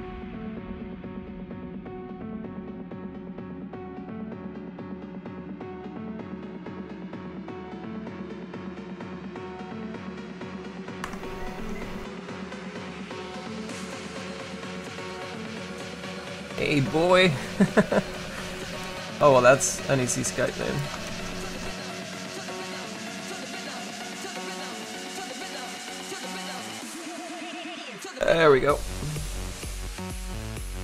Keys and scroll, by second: 10.9 F5, 21.1 c.